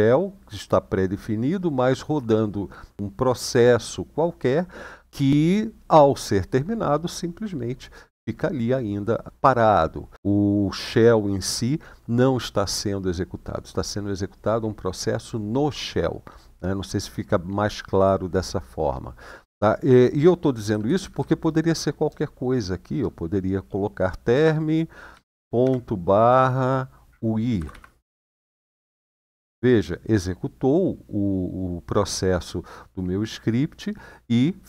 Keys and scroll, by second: 20.3 Right, 20.4 Right, 20.6 Right, 20.7 Right, 20.9 Right, 21.8-22.6 BackSpace, 24.9 ., 25.3 /, 27.3 typing, 28.6 Return.